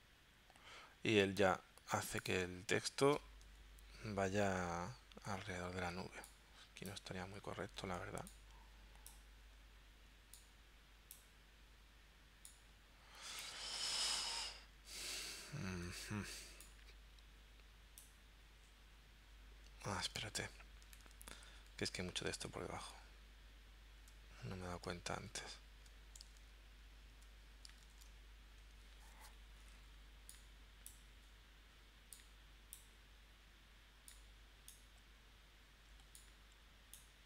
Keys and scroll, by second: 20.2 super+z, 21.1 super+z, 21.9 super+z, 22.8 super+z, 25.2 super+z, 26.4 super+z, 27.8 shift+super+z.